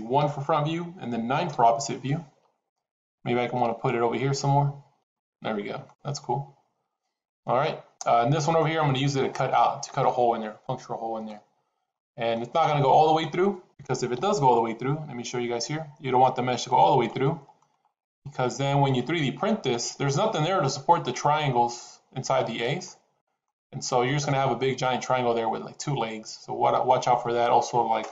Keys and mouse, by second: 0.1 KP_1, 1.4 KP_9, 3.5 g, 5.7-7.8 middle drag, 8.2-8.6 middle drag, 10.5 middle click, 11.8-12.2 middle drag, 12.7 click, 14.0 KP_7, 15.2 g, 16.9-17.5 middle drag, 18.0-18.9 middle drag, 19.2-19.6 middle drag, 22.7-23.3 middle drag.